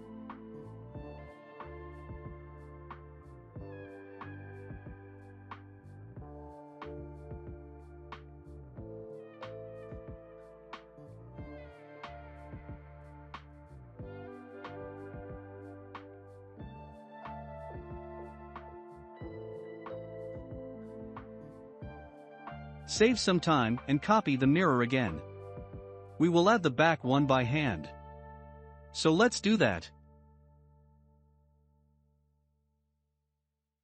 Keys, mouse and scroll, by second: 0.1 Tab, 0.4-1.0 scroll up 2, 1.8-3.0 drag, 3.4 scroll down 5, 4.0 middle click, 4.5 scroll down 1, 4.9-6.8 shift+middle drag, 6.8 click, 12.0-13.3 middle drag, 13.3 Tab, 13.6-14.0 drag, 14.0-14.5 scroll down 2, 14.5-15.1 shift+middle drag, 15.1 scroll up 1, 16.4 click, 16.4 scroll up 2, 16.8-17.3 middle drag, 17.3-17.7 scroll, 20.4 shift+click, 22.1 ctrl+l, 24.0 click, 24.6-25.2 scroll down 2, 25.2-28.8 middle drag, 29.4-30.9 drag, 30.9 shift+d.